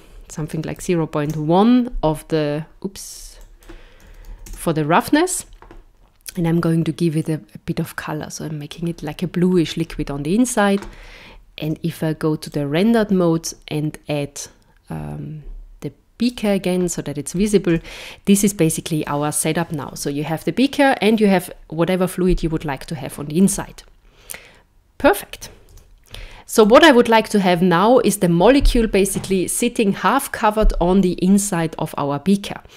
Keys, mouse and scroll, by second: 3.1 click, 6.3 click, 9.5-11.6 scroll down 2, 11.6 z, 16.3 click, 17.7 KP_0, 25.7 z.